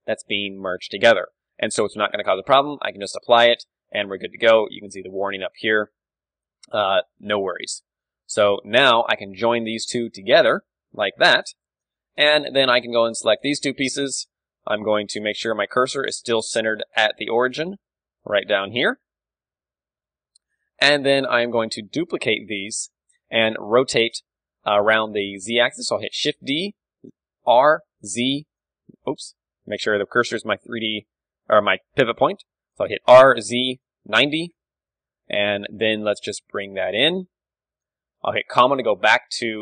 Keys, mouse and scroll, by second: 0.0-3.0 middle drag, 3.0-6.2 drag, 6.4-8.7 middle drag, 8.3 z, 8.7 click, 8.7 z, 9.4-11.1 drag, 10.7 ctrl+j, 11.4-13.7 drag, 12.0 Tab, 12.4 a, 13.2 l, 13.9 l, 15.5-17.3 middle drag, 17.3-17.7 scroll up 1, 17.7 d, 17.9-20.1 drag, 18.8 d, 19.0 d, 19.4 middle click, 19.4 d, 20.1-21.9 right drag, 24.8-26.4 middle drag, 26.4 shift+d, 31.0 ., 33.1 r, 35.2-37.8 middle drag, 36.0 g, 37.9 click, 38.6 ,.